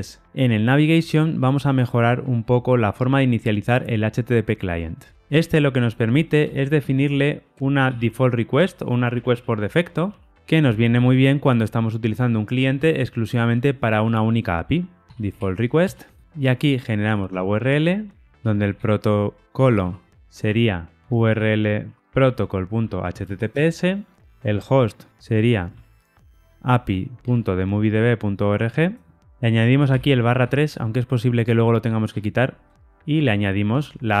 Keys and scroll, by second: 8.5 Return, 15.8 Return, 27.2 Tab, 33.7 Tab.